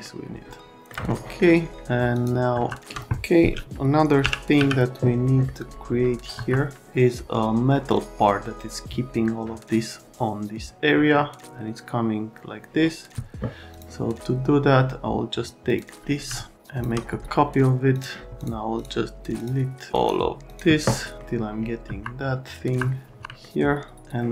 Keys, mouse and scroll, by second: 2.1 click, 2.5 F3, 2.8 alt+middle click, 4.2 l, 4.5 z, 5.2 middle click, 6.3 F3, 13.7 click, 15.7 click, 16.3 alt+middle click, 17.9 click, 18.4 ctrl+click, 18.7 ctrl+click, 19.3 ctrl+click, 19.9 right click, 20.5 click, 21.2 middle click, 21.8 F3, 22.6 F3, 23.1 F3, 23.4 middle click.